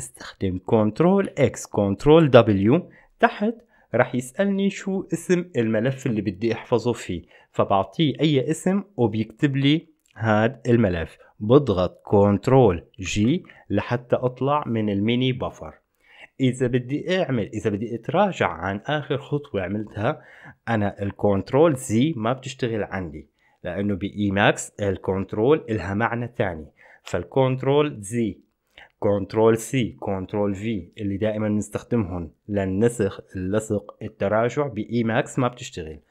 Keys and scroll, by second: 1.5 ctrl+x, 2.2 ctrl+w, 13.3 ctrl+g.